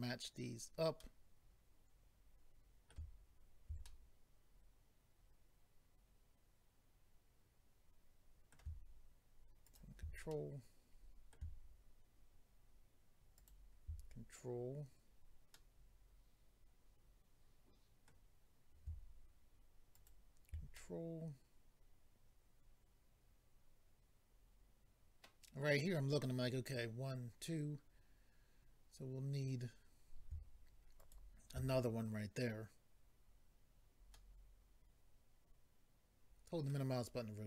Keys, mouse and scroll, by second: 1.0 middle click, 3.9 middle click, 9.6 ctrl+right click, 10.3 middle click, 13.4 ctrl+right click, 15.5 middle click, 19.9 ctrl+right click, 20.7 middle click, 31.0 ctrl+right click, 34.1 middle click.